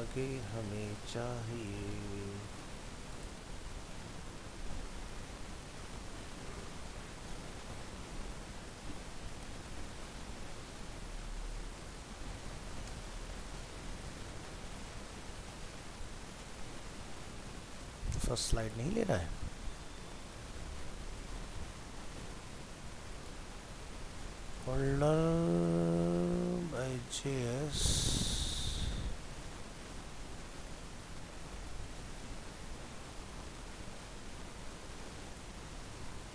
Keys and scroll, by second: 1.9 ctrl+c, 4.2 ctrl+v, 5.8 alt+Tab, 19.4 shift+Left, 23.2 ctrl+c, 25.0 ctrl+v, 35.8 ctrl+v.